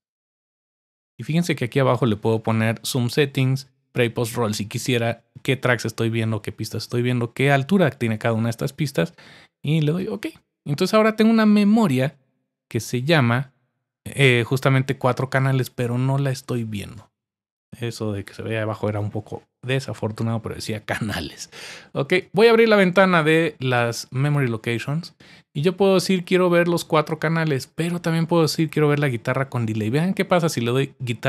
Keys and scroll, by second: 0.0-1.1 typing.